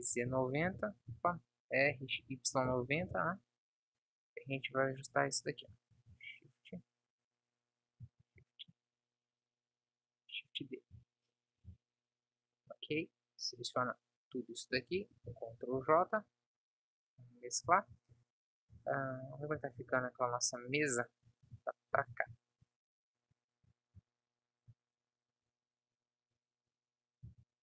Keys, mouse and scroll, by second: 1.5 ctrl+z, 2.2 r, 3.4-4.9 middle drag, 6.3 shift+d, 15.6 ctrl+j, 15.9 ctrl+s, 19.0 KP_0, 20.0 shift+f.